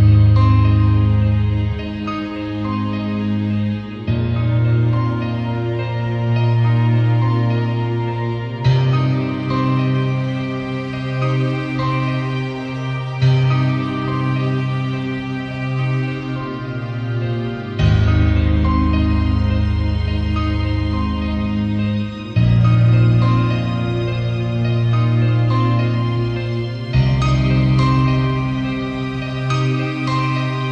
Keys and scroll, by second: 10.4 b, 11.4 [, 24.5 v.